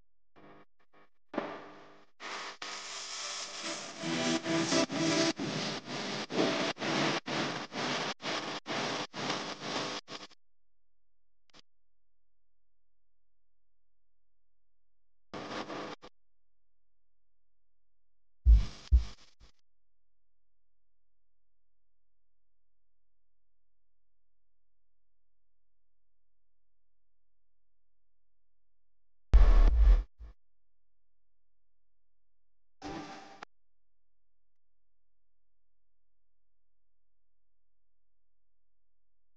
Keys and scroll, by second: 1.2 space, 7.8 space, 8.3 super+space, 8.9 super+space, 11.6 space, 12.2 alt+super+space, 12.7 super+space.